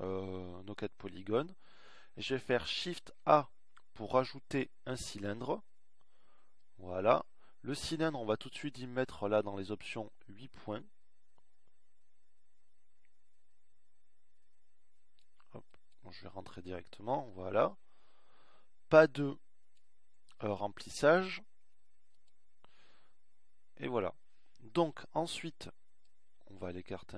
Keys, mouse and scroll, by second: 4.7 shift+a, 24.2 KP_1.